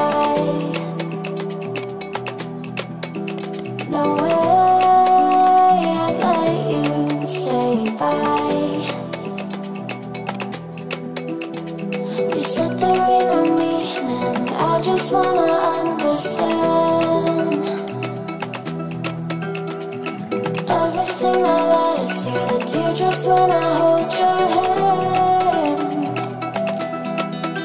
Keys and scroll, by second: 16.8 ctrl+z, 17.0 ctrl+g.